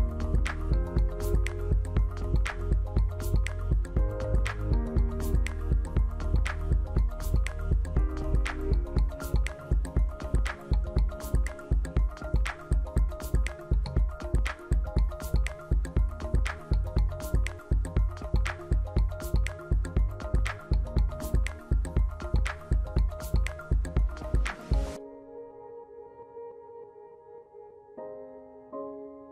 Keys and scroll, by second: 16.4 ctrl+alt+2.